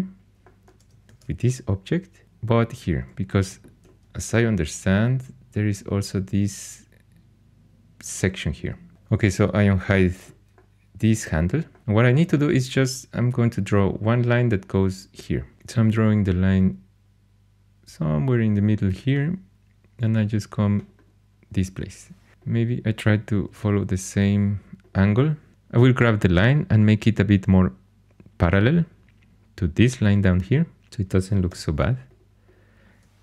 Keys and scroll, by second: 1.0 shift+super+e, 3.4 h, 8.9 alt+h, 15.5 shift+a, 22.3-24.0 typing, 31.4 2.